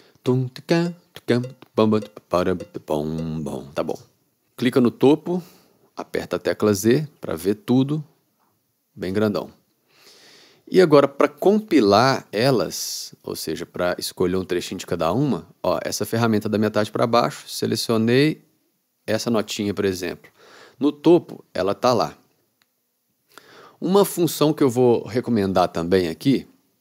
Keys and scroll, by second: 4.1 space, 6.6 z.